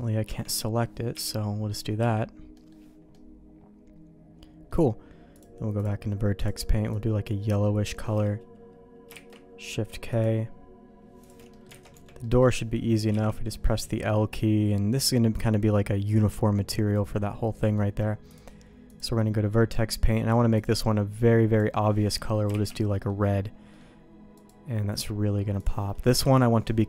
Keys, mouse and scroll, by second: 0.2 Tab, 1.1 l, 2.0 l, 2.5 middle click, 3.1-4.7 middle drag, 5.4 click, 9.1 shift+k, 10.1-11.3 drag, 11.5 middle click, 11.8 alt+a, 11.9 Tab, 12.2 middle click, 13.1 l, 13.6 middle click, 14.3-15.4 middle drag, 15.7-17.7 middle drag, 18.3 click, 19.6 middle click, 20.5 click, 22.5 shift+k, 22.9 middle click, 23.7 middle click, 24.3-25.6 drag, 25.8 middle click, 26.2 alt+a.